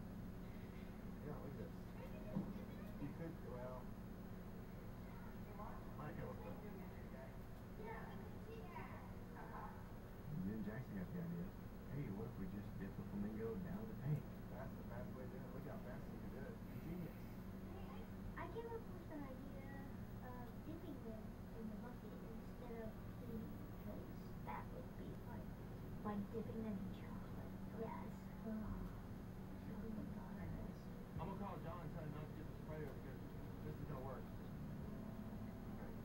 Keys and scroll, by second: 33.2 ].